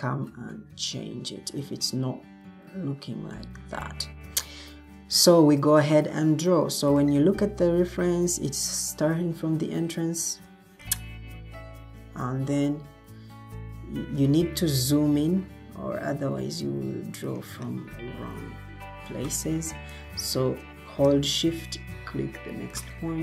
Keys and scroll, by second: 0.0-1.0 typing, 14.6 Escape.